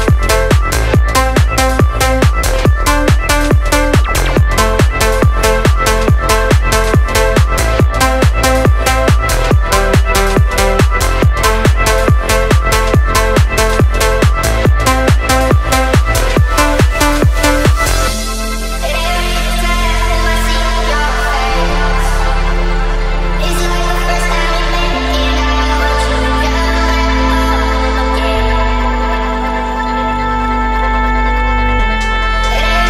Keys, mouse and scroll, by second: 2.0 click, 2.9-3.5 drag, 4.8 click, 6.4-7.8 drag, 9.0 click, 10.2-11.8 drag, 13.0 click, 14.3-15.3 drag, 16.2 click, 17.6 click, 18.8 click, 20.1-21.3 drag, 22.0 click, 22.7 space.